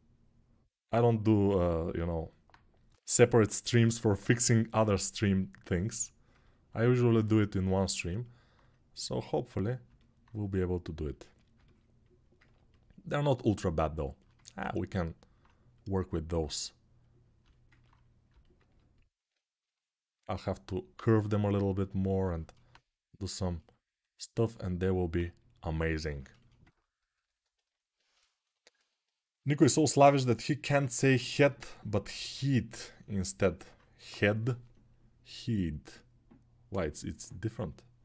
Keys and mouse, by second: 2.6 g, 11.6-14.7 alt+right drag, 14.7-26.0 drag, 26.0-28.8 alt+shift+right drag, 28.8-38.0 alt+drag.